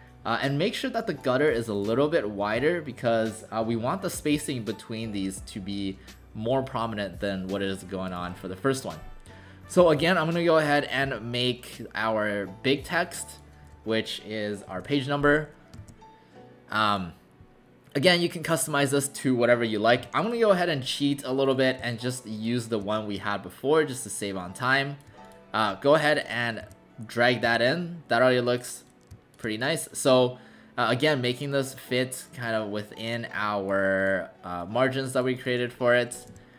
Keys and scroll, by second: 14.4-15.3 typing, 15.8 ctrl+a, 20.0 Delete, 26.6 w, 27.4 w, 36.3 w.